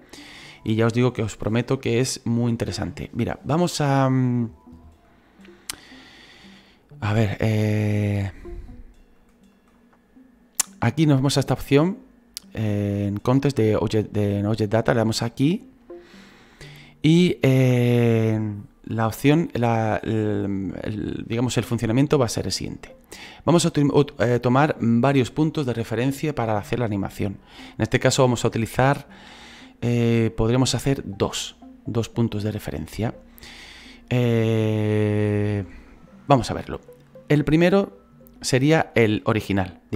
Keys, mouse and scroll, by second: 2.3-8.5 drag, 8.5-9.9 scroll up 3, 9.9-16.4 drag.